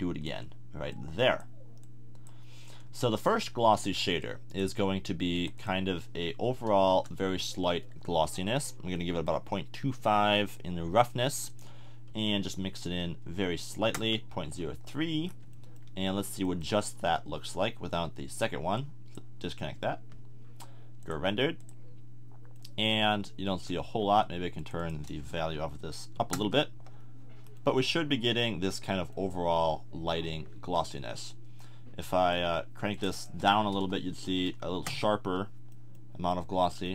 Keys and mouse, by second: 3.2 click, 4.2-8.1 drag, 17.4 click, 26.6 middle click, 32.9-35.7 drag.